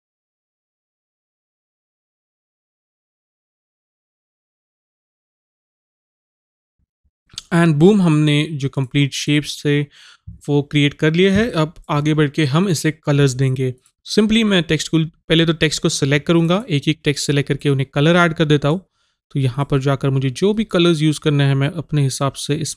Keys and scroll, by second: 4.2 a.